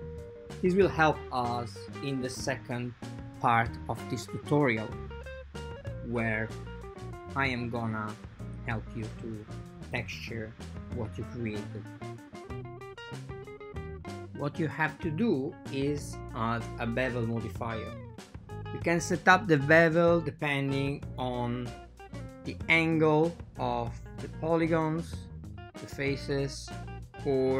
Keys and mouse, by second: 2.2 drag, 3.4 click, 4.2 Tab, 5.5 click, 5.9-6.4 right drag, 6.4 click, 7.3 click, 7.9 click, 8.7 click, 9.4 click, 10.6-11.0 right drag, 13.5 click, 14.1 click, 14.6-15.2 drag, 16.0-16.4 drag, 17.3 click, 19.0 drag, 20.4 Tab, 21.3 click, 21.9 click, 23.1 Tab.